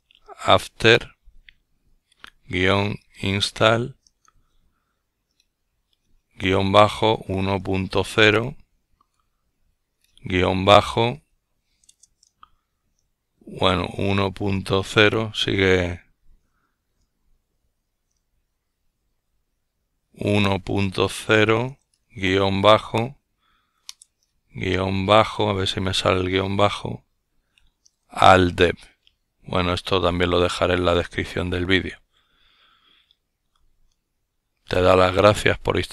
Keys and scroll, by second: 0.0-4.1 typing, 5.6-7.5 typing, 10.0-10.7 typing, 13.2-14.2 typing, 16.2-16.9 typing, 19.6-21.8 typing, 24.3-25.7 typing, 26.9-27.8 typing, 29.2-30.8 typing.